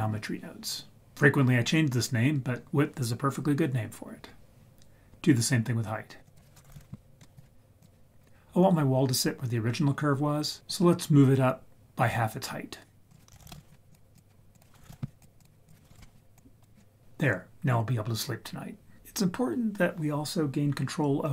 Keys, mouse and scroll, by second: 6.2-7.8 drag, 13.1 click, 13.3 shift+a, 13.4 s, 14.5-15.4 drag, 15.6 click, 16.3 click.